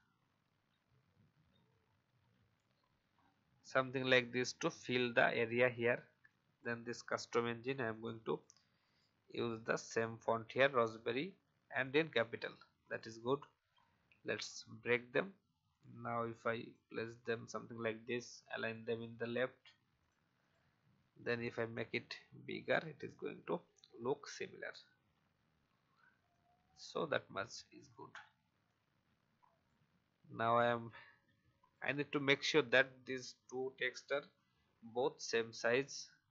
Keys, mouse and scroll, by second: 0.3 shift+Down, 0.8 shift+Down, 0.9 shift+Down, 3.1 alt+scroll down 1, 4.0 alt+scroll down 1, 5.0-5.4 alt+scroll up 1, 5.7-7.4 drag, 8.8 right click, 10.7 click, 12.8 right click, 13.6 click, 14.3-14.6 alt+scroll up 1, 15.1 click, 19.3-19.9 alt+scroll up 1, 19.9 click, 21.6 shift+click, 23.8 alt+scroll down 1, 24.5 click, 25.1-25.5 alt+scroll down 1, 26.2-28.5 drag, 28.6 shift+click, 30.6-31.7 shift+drag, 32.3-32.7 alt+scroll up 1, 34.1-36.3 drag.